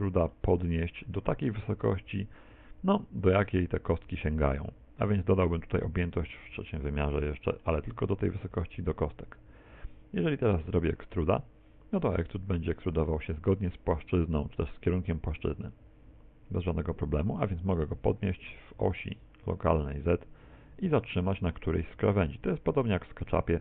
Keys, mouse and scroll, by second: 0.4 middle click, 6.7 middle click, 7.3 shift+middle click, 11.2 e, 18.0 g.